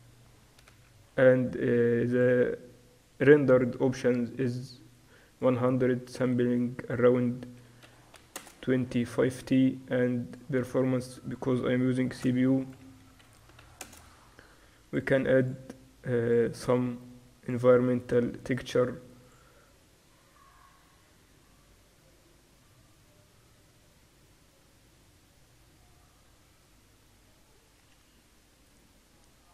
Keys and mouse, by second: 0.0-1.0 drag, 0.8 KP_0, 2.1 middle click, 4.1-9.4 drag, 9.4 middle click, 10.3-14.6 drag, 14.9-18.2 drag, 19.3-29.5 drag.